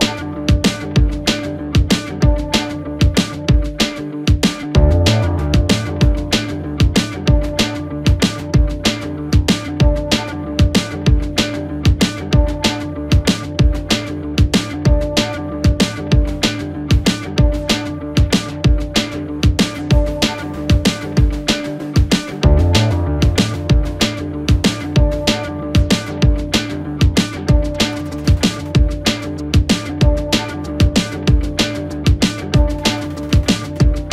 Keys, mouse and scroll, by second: 0.7 shift+middle click, 1.1-2.1 scroll up 2, 2.1 click, 3.5 click, 4.7 s, 7.8 click, 9.7 KP_1, 11.4 click, 12.9 x, 14.8 click, 16.4 2, 17.0 click, 17.2 click, 17.9 KP_3, 19.7 click, 20.5 shift+middle click, 21.1-21.8 scroll up 2, 21.8 s, 24.1 KP_1, 25.3 s, 28.0 KP_3, 29.8 1, 30.9 e, 33.4 r.